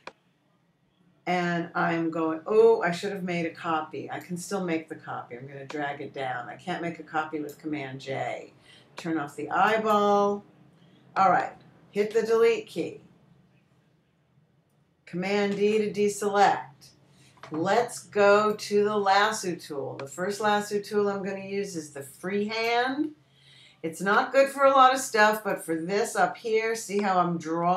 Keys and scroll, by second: 13.6 BackSpace, 17.0 super+d.